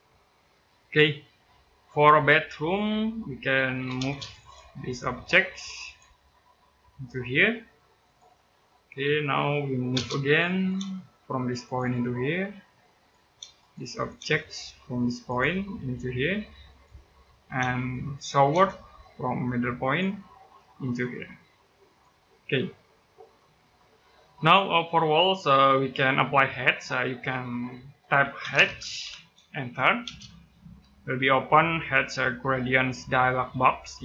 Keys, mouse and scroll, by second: 0.0-0.4 scroll down 1, 0.4 middle click, 2.3 scroll down 1, 2.6 middle click, 3.6 m, 3.8 space, 4.2 click, 4.9 space, 5.6 click, 5.9-6.3 scroll down 1, 6.3-7.3 scroll up 1, 7.8 click, 8.2 middle click, 8.5 scroll up 1, 9.1-9.7 scroll down 1, 9.7 space, 10.0 click, 10.6 space, 11.4 click, 13.2 space, 13.4 click, 14.0 space, 15.0 click, 16.9 middle click, 17.4 space, 17.6 click, 18.3 space, 18.6-19.6 scroll up 1, 19.6 click, 19.9-21.6 scroll down 1, 21.6 click, 22.2-23.1 scroll down 1, 23.2 middle click, 27.9-29.8 typing, 32.4 click.